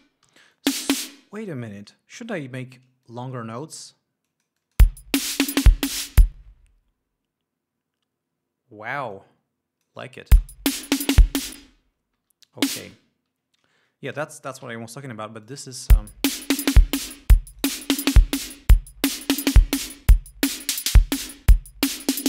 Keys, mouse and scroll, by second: 0.0 space, 0.5 e, 0.8-1.6 drag, 2.4 d, 3.3 click, 4.5-5.2 drag, 5.1 space, 6.6 space, 9.4 click, 10.4 click, 10.6 space, 11.8 space, 12.4 e, 12.7 click, 15.7 click, 16.2 l, 16.9 click, 17.8 click, 20.4-22.2 drag.